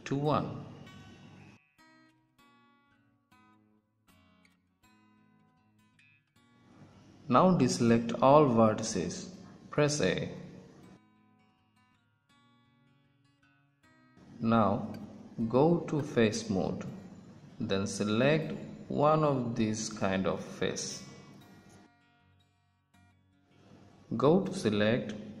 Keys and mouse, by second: 0.7-2.5 drag, 2.5 middle click, 6.4-8.5 middle drag, 10.5 a, 16.9-18.9 drag, 19.8 click, 21.6-25.4 middle drag.